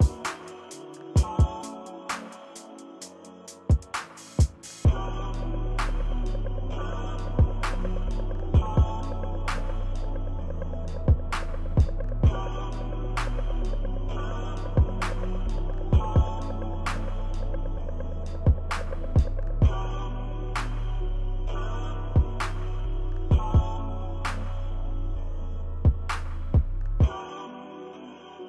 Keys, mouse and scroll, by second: 0.4 ctrl+-, 0.6 click, 0.7 ctrl+=, 0.8 click, 1.4 click, 1.6 click, 1.9 click, 2.8 click, 3.3 ctrl+-, 3.4 ctrl+scroll down 1, 3.5 ctrl+scroll up 1, 3.5 ctrl+=, 3.6 click, 3.9 ctrl+middle click, 3.9 ctrl+scroll, 4.4 ctrl+=, 4.5 ctrl+=, 4.6 click, 4.7 ctrl+=, 4.8 click, 5.2 click, 5.6 ctrl+-, 5.9 click, 6.3 click, 7.0 ctrl+-, 7.1 ctrl+=, 7.2 click, 8.0 click, 8.6 click, 8.8 ctrl+middle click, 9.2 ctrl+=, 9.3 click, 10.0 click, 10.9 ctrl+scroll down 2, 10.9-11.2 ctrl+scroll up 3, 11.2 click, 11.9 ctrl+-, 12.1 ctrl+=, 12.2 click, 12.8 ctrl+-, 13.1 ctrl+=, 13.7 click, 13.7 ctrl+=, 13.8 click, 14.5 ctrl+-, 14.6 ctrl+=, 14.7 click, 15.2 ctrl+-, 15.4 click, 15.6 click, 16.3 ctrl+=, 16.4 click, 16.7 click, 16.9 ctrl+-, 17.0 ctrl+=, 17.1 ctrl+=, 17.3 click, 18.0 ctrl+=, 18.0 ctrl+middle click, 18.2 ctrl+-, 18.5 ctrl+=, 18.8 ctrl+=, 19.1 click, 19.4 ctrl+=, 19.8 click, 20.6 ctrl+-, 20.8 ctrl+=, 20.9 click, 21.8 click, 22.8 ctrl+-, 22.8-23.1 ctrl+scroll down 2, 22.9 ctrl+-, 23.1 ctrl+=, 23.1 scroll up 2, 23.2 click, 23.8 click, 24.3 click, 25.2 ctrl+=, 25.3 click, 26.2 ctrl+=, 26.4 click, 27.2 click, 27.8 ctrl+-, 28.0 ctrl+=, 28.1 click.